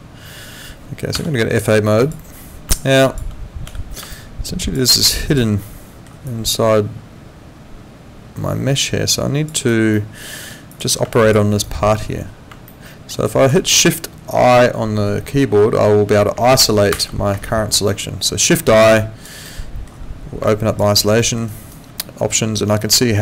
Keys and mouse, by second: 1.2 F8, 2.0 click, 2.7 alt+click, 3.6 f, 4.1 alt+click, 5.6 alt+middle click, 6.3 alt+click, 9.5 alt+right click, 9.9 alt+middle click, 10.7 click, 11.1 alt+click, 11.5 alt+right click, 12.7 alt+middle click, 13.3 alt+click, 18.8 alt+click, 19.5 alt+middle click, 20.9 alt+right click, 21.2 alt+middle click, 21.5 alt+right click.